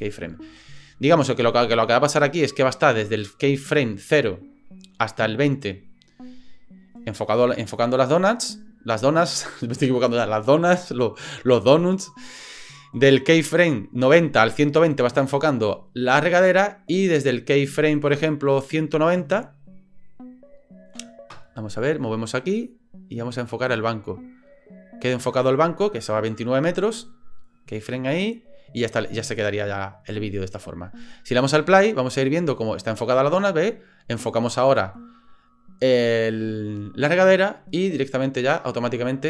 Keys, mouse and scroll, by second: 0.1 click, 1.9-3.7 drag, 4.1-5.8 drag, 6.3 click, 12.0 click, 13.3-19.7 drag, 21.7-25.3 drag, 27.2 click, 28.1-31.4 drag, 31.7 space.